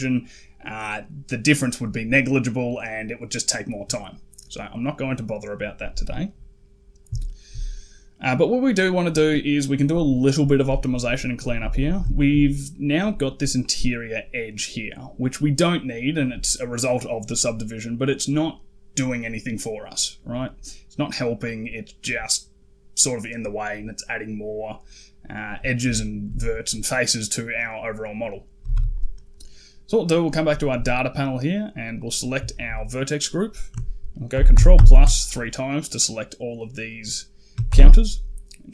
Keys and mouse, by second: 4.5 middle click, 7.1 shift+middle click, 7.6 middle click, 11.6 alt+click, 11.9 shift+click, 12.1 middle click, 20.5 click, 21.0 click, 25.8 shift+click, 28.4 a, 28.6 a, 31.9 click, 32.3 shift+click, 32.6 click, 34.2 ctrl+KP_Add, 34.4 ctrl+KP_Add, 34.6 ctrl+KP_Add, 37.5 shift+h.